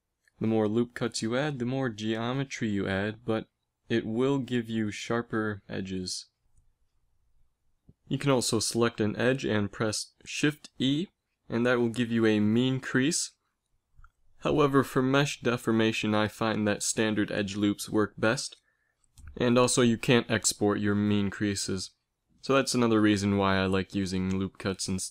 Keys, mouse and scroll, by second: 1.7-3.0 middle drag, 3.0 ctrl+r, 8.4 ctrl+r, 11.4 ctrl+r, 17.3 click, 18.1 g, 18.9 g, 22.9 Tab, 23.8 space.